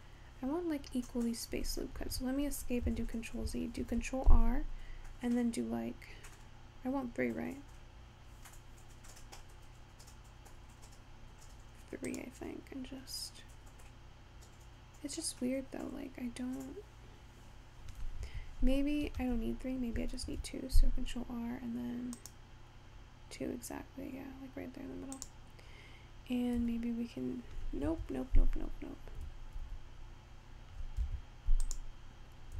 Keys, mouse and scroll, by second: 2.9 ctrl+z, 3.8 ctrl+r, 19.2 ctrl+z, 20.3 ctrl+r, 26.6 s, 29.2 g, 31.7 click.